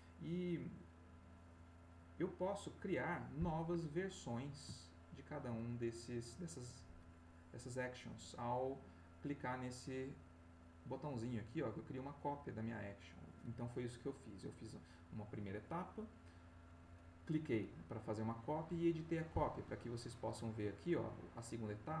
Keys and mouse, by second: 1.1 click, 3.0 middle click, 4.3-5.6 middle drag, 5.7 ctrl+middle click, 7.3 click, 19.6 click, 21.1 click.